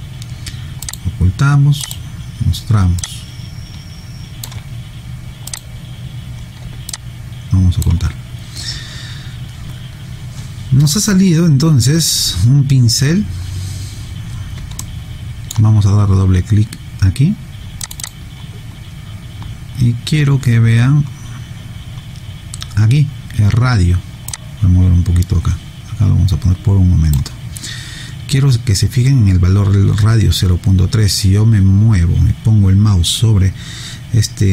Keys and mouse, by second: 0.9 click, 3.0 alt+click, 5.5 click, 6.9 alt+click, 14.8 alt+middle click, 24.3 click.